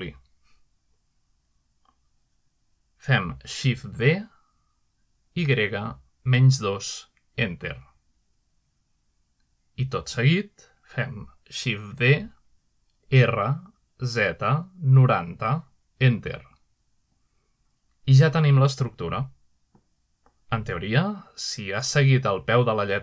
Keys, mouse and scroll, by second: 0.0-4.3 middle drag, 5.2-5.9 middle drag, 6.2-8.7 typing, 8.6 Return, 11.8 shift+d, 13.2 r, 14.2 z, 14.9 9, 15.2 0, 16.0 Return, 18.1-21.2 shift+middle drag, 20.9 typing.